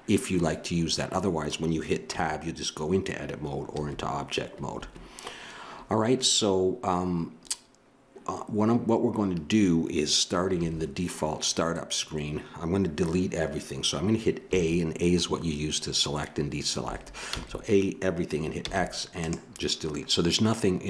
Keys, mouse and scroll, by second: 2.1 Tab, 10.6 a, 14.5 a, 16.8 a, 17.3 a, 18.6 x.